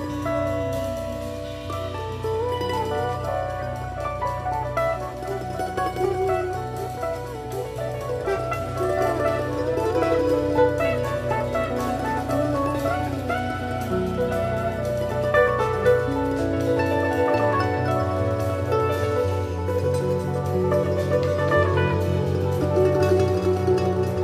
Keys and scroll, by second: 11.1 BackSpace, 13.2 shift+Down, 14.0 shift+Up, 15.8 i, 17.2 super+-, 20.2 shift+Up.